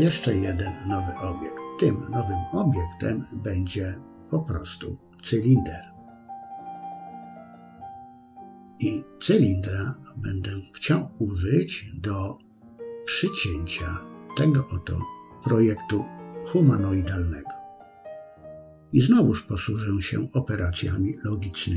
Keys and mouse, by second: 0.9 r, 3.3 g, 6.3 r, 9.0-10.9 middle drag, 11.5 KP_3, 12.5-13.0 shift+middle drag, 13.4-14.2 middle drag, 14.6 middle click.